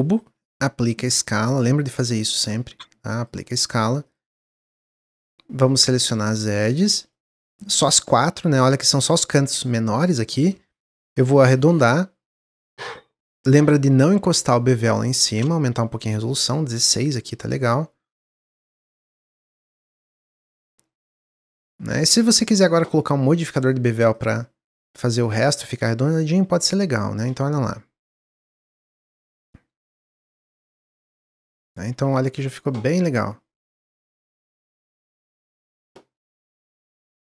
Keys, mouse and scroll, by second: 0.3 Tab, 1.2-3.7 drag, 3.7 Tab, 4.0 click, 4.5 shift+click, 4.8 middle click, 5.6 shift+click, 5.9 middle click, 6.8 shift+click, 7.0-8.8 middle drag, 8.8 scroll up 2, 9.2-11.1 shift+middle drag, 11.1 ctrl+b, 13.4-15.4 middle drag, 15.4-19.4 drag, 19.4-20.4 middle drag, 20.4 alt+click, 21.0-21.7 middle drag, 21.7 Tab, 21.9-23.4 middle drag, 23.4 drag, 24.1 click, 25.0-25.7 drag, 26.0-28.8 shift+drag, 29.0 middle click, 29.3 Tab, 29.8 Tab, 30.0 middle drag, 30.2-30.6 scroll down 2, 30.6-32.4 middle drag, 32.4 drag, 33.4 click.